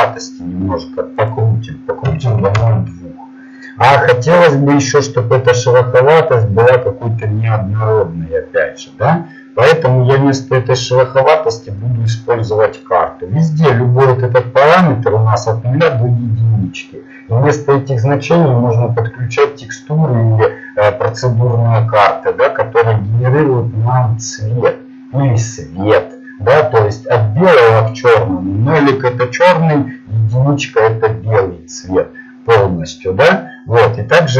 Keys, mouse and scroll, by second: 0.1-3.1 drag, 11.5-14.2 drag.